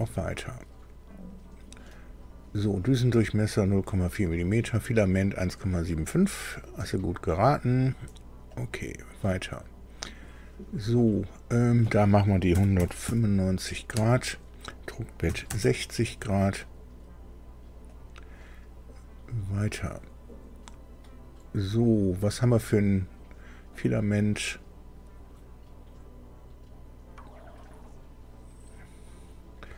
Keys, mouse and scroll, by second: 1.1 click, 8.6 click, 11.6 click, 12.5 KP_1, 12.8 KP_9, 13.0 KP_5, 13.9 Tab, 15.3 KP_6, 15.5 KP_0, 17.9 click, 23.8 click, 27.9 click.